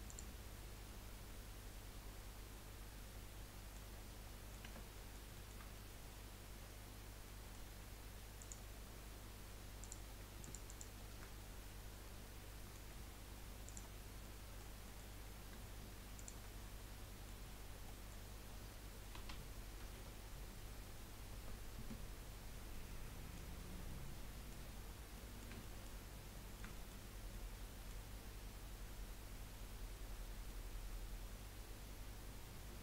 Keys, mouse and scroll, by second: 0.8 middle click, 4.0-4.4 scroll up 1, 4.4 middle click, 4.6 Tab, 4.9-7.8 middle drag, 7.8-8.2 scroll up 1, 8.4 click, 9.3-9.8 scroll up 1, 9.8 click, 10.4 alt+shift+click, 10.7 alt+shift+click, 11.5-12.0 scroll up 1, 12.0-13.8 middle drag, 13.8 shift+click, 13.9 scroll down 3, 14.3-16.1 middle drag, 16.1 shift+click, 16.5-16.9 scroll down 2, 16.9 middle click, 17.5 scroll up 2, 17.9-19.8 middle drag, 19.8 s, 22.7-24.7 middle drag, 24.7 scroll up 1, 25.1 middle click, 26.0 scroll up 1, 26.3 middle click, 27.0-27.4 scroll up 2, 27.4-30.1 middle drag, 30.1-30.5 scroll down 3, 30.5-32.8 middle drag.